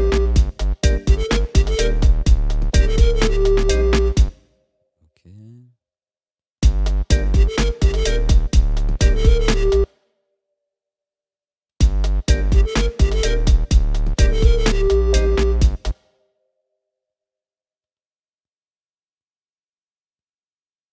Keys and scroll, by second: 4.2 space, 6.6 space, 9.9 space, 11.8 space, 15.9 space.